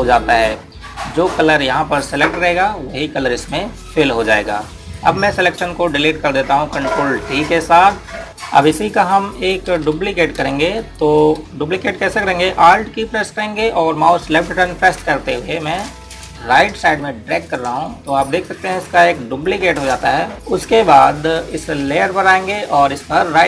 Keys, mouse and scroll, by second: 8.2 ctrl+d, 8.3 click, 10.6 ctrl+=, 10.8-11.8 typing, 11.7 click, 16.2 alt+Num_Lock, 17.1 click.